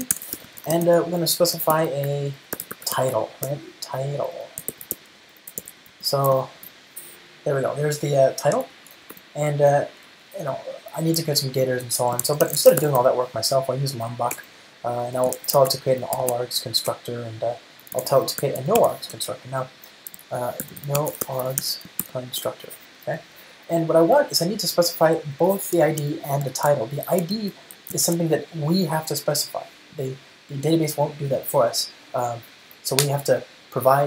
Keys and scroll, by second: 6.9 alt+super+l, 9.1 super+BackSpace, 14.6 Return, 20.4 ctrl+alt+shift+Left, 24.6 Return, 25.9 ctrl+alt+shift+Right, 28.1 ctrl+alt+shift+Left.